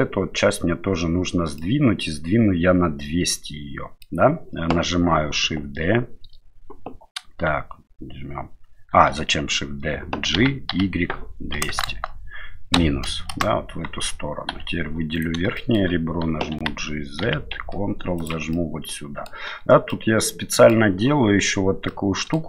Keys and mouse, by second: 1.6-4.1 middle drag, 10.4 g, 14.5 2, 15.1 right click, 15.6 shift+middle click, 16.5 g, 18.5 middle click, 19.9 middle click, 21.9 middle click.